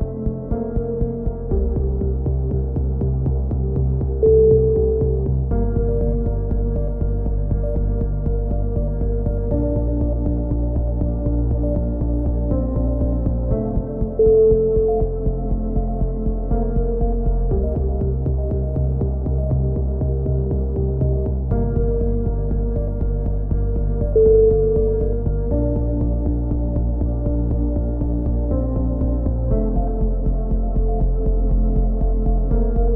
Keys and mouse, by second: 0.1 KP_3, 0.4 z, 0.9 right click, 1.1 alt+m, 1.6 z, 2.4 right click, 2.5 f, 2.9 a, 3.2 click, 4.2-5.8 right drag, 5.8 KP_3, 7.5 e, 8.6 right click, 9.1 click, 9.6 z, 10.0 click, 11.0 click, 11.8 click, 12.1 right click, 12.8 a, 13.5-14.9 drag, 13.5 right click, 14.5 ctrl+z, 14.9 g, 15.7 a, 17.4 right click, 17.5 KP_7, 17.9 KP_1, 18.3 click, 19.6 e, 20.5 KP_3, 20.9 click, 23.9 click, 24.7 click, 26.0 click, 26.0 e, 27.0 click, 28.0 g, 29.0 KP_1, 29.5 click, 30.2 click, 30.4 g.